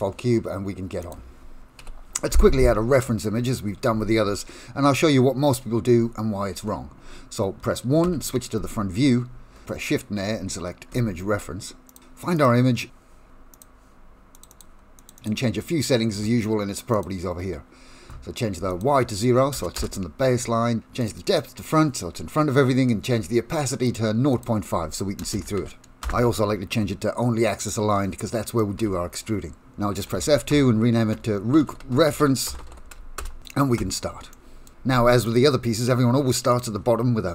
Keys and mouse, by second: 1.8 Delete, 8.0 KP_1, 10.3 shift+a, 17.0 click, 18.8-20.2 drag, 21.0 click, 23.8 click, 24.3-26.6 drag, 27.6 click, 28.6 middle click, 28.8 F2, 30.3 o, 34.3 middle click, 34.9 shift+a.